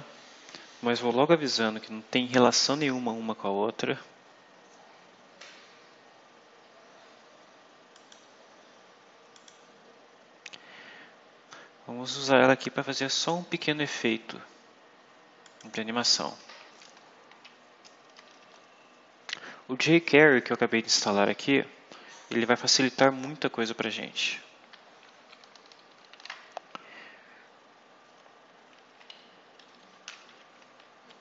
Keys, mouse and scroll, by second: 7.8 click, 9.2 click, 12.0-14.0 drag, 15.3 click, 18.1 Return, 25.0-26.5 typing, 28.8 ;, 29.3 BackSpace, 30.7-31.2 typing.